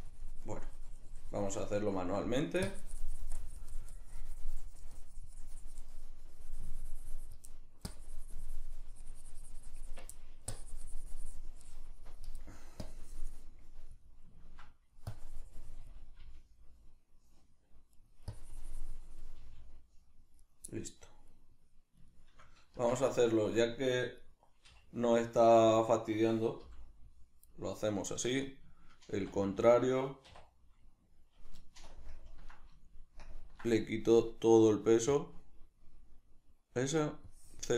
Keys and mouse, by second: 1.8 shift+middle click, 2.6-7.5 drag, 7.5 middle click, 7.9-10.1 drag, 10.1 middle click, 10.5-12.5 drag, 12.5 middle click, 12.9-14.1 drag, 14.1-15.1 middle drag, 15.1-18.1 drag, 16.2 g, 18.1 right click, 18.3-20.5 drag, 19.4 g, 20.5 right click, 20.7 middle click, 21.3 right click, 22.1-24.2 shift+middle drag, 22.8 Tab, 24.2 right click, 24.7 4, 25.8 right click, 26.7 l, 27.5-35.1 middle drag, 29.1 ctrl+i, 31.9 ctrl+KP_Subtract, 35.1 click, 37.2-37.7 drag.